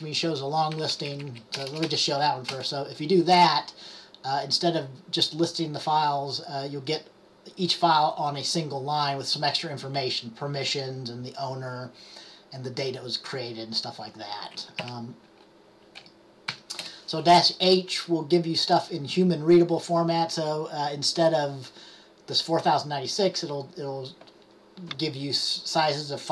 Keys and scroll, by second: 1.0 Left, 1.2 Left, 1.3 Left, 14.9 Up, 16.1-16.6 typing.